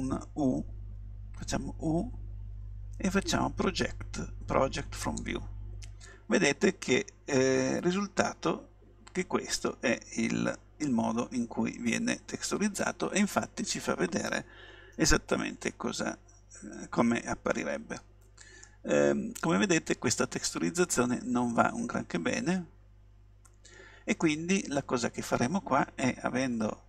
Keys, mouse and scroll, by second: 1.8 u, 18.0-18.7 scroll up 1, 18.7-20.5 middle drag, 21.4-22.7 middle drag.